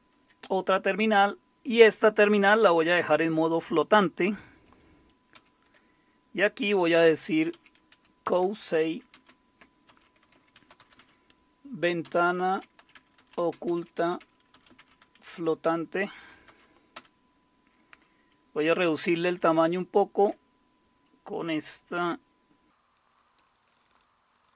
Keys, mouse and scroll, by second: 5.3 super+s, 7.2-17.5 typing, 18.9-19.7 typing, 23.5 alt+shift+super+j, 23.6-24.0 alt+shift+super+j, 24.3-24.5 alt+shift+super+l.